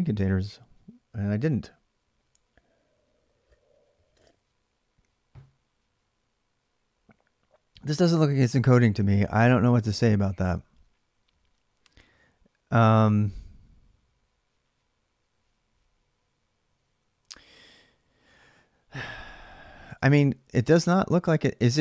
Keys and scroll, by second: 19.7 alt+Tab.